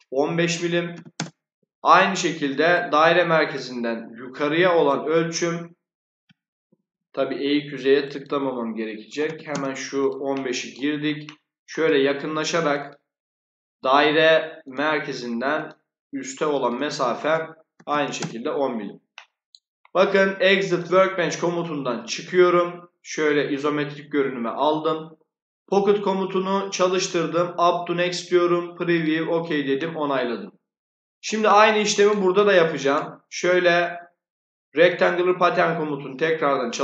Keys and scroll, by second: 0.6 1, 1.1 Return, 6.4 Escape, 8.7-9.6 typing, 17.4-18.3 typing.